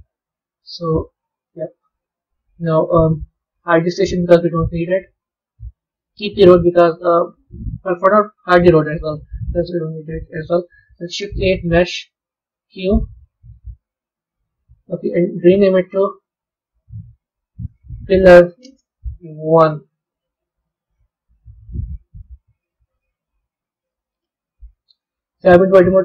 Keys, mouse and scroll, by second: 4.0 click, 5.5-8.6 middle drag, 8.6 click, 8.9-9.7 scroll up 3, 9.7-10.9 middle drag, 10.9 shift+a, 15.4 click, 18.0 l, 21.5 KP_1, 22.2-23.1 scroll up 12, 23.1-24.8 middle drag, 24.8 b.